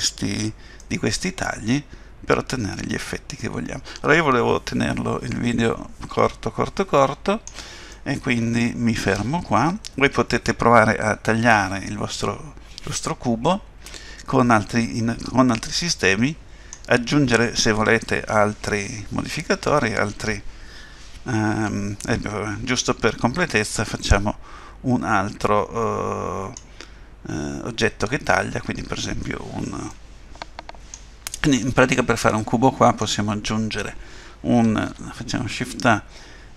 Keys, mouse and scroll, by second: 0.8 middle click, 7.9 middle click, 22.1 middle click, 29.9 middle click, 32.2 middle click, 34.9 shift+a.